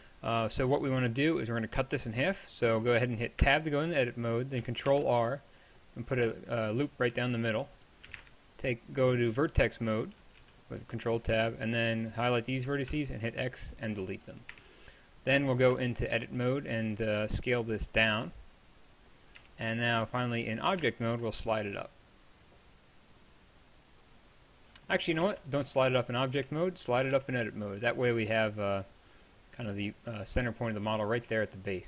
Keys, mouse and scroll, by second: 3.4 Tab, 4.9 ctrl+r, 7.1 z, 8.2 ctrl+Tab, 10.2 a, 10.4 b, 12.9 x, 14.5 Tab, 15.4 Tab, 15.7 a, 17.2 s, 19.4 Tab, 20.7 g, 25.3 ctrl+z, 26.4 Tab, 27.0 g, 30.5-31.8 middle drag.